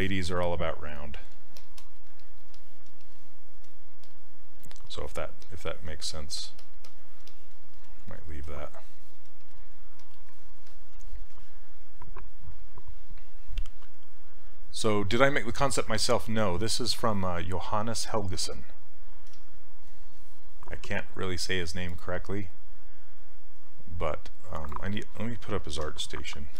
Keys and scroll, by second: 25.7 a.